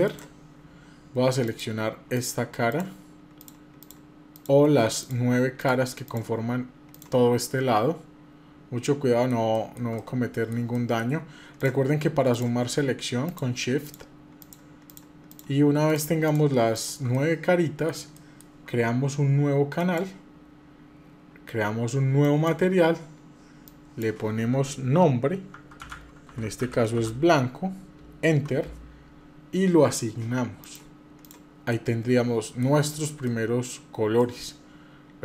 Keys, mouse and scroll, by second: 1.2 click, 1.9-4.2 shift+drag, 4.8 shift+click, 7.2-9.1 middle drag, 9.3 shift+middle click, 9.7-10.9 middle drag, 11.3 click, 12.0 click, 13.0-15.2 shift+drag, 16.1 shift+click, 16.6 shift+click, 16.9 middle click, 17.9 shift+middle click, 19.5 click, 22.0 click, 23.4-28.3 drag, 30.3 click, 30.9 click, 31.5 middle click, 32.6 shift+middle click, 34.0 middle click.